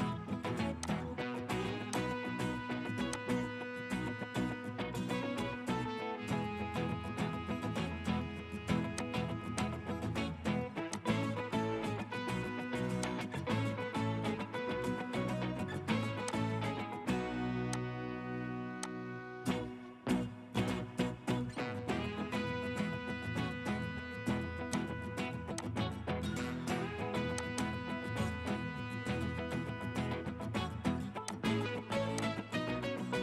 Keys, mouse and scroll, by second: 4.3 middle click, 15.5 middle click, 15.5 scroll up 1, 19.7 scroll up 1, 20.0 middle click, 22.1 scroll up 1, 27.6 double click.